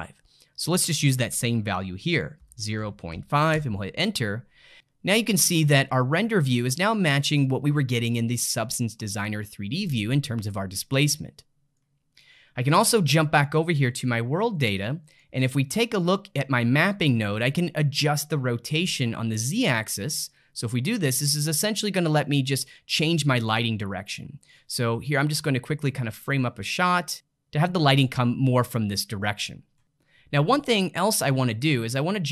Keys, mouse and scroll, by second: 0.7-3.7 drag, 6.0-9.1 middle drag, 10.8-13.2 middle drag, 13.2-14.5 drag, 14.5-18.5 middle drag, 20.3-23.3 drag, 24.9-27.1 middle drag, 31.6-32.3 drag.